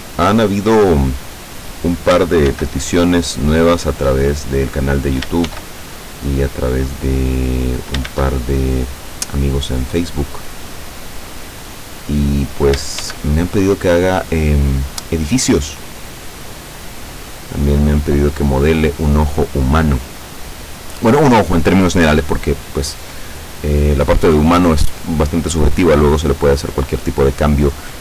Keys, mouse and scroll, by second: 1.8 click, 2.5 shift+d, 4.9 click, 5.5 shift+d, 7.7 click, 8.1 shift+d, 12.3 click, 13.0 shift+d, 17.4 click.